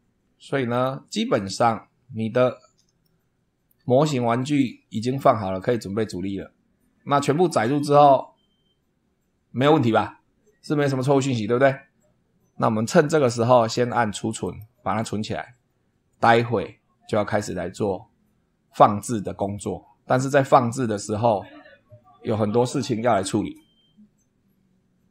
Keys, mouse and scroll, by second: 0.7 click, 3.0-3.8 shift+middle drag, 4.5-5.1 shift+middle drag, 5.5 shift+click, 14.4 click.